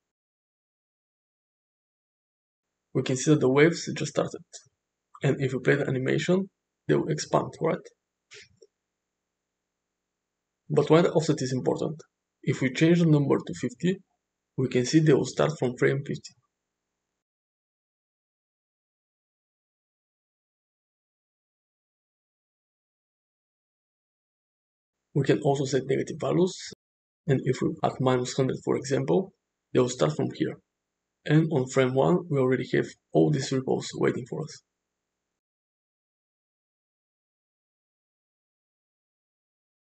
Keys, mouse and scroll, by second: 8.1 space, 10.2 shift+space, 10.4 shift+Left, 11.7-13.6 drag, 15.6 space, 18.4 space, 20.4 Left, 20.6 Left, 20.7 Left, 22.1 space, 24.6 space, 26.7-28.2 drag, 27.1 0, 29.5 middle click, 32.6 space, 34.9-35.2 shift+middle drag, 35.8 space, 37.2-37.5 shift+middle drag, 38.5 middle click.